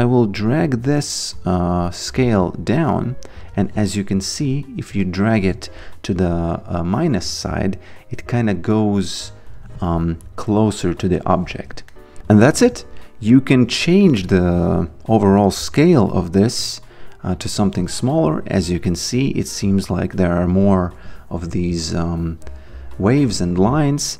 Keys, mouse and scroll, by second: 0.3 click, 2.5 click, 4.6 alt+right click, 5.0 alt+click, 7.9 click, 11.9 alt+middle click, 13.3 click, 15.2 click.